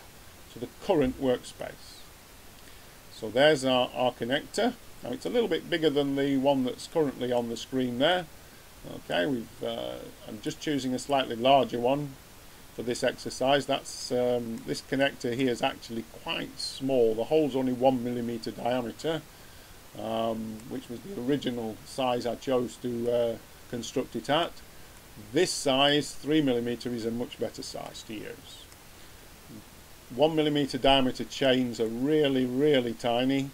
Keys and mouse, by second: 0.0-0.7 drag, 1.6-3.3 middle drag, 10.0-13.9 middle drag, 21.4-23.4 middle drag, 29.8 middle click, 31.9-32.5 drag.